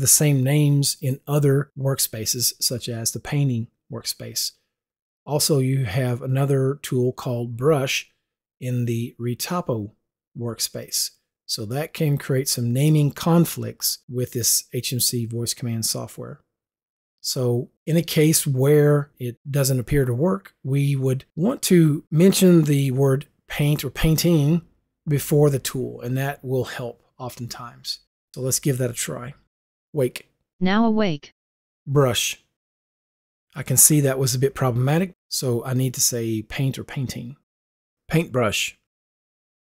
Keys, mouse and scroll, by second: 8.9 click, 12.1 click, 38.5 shift+u.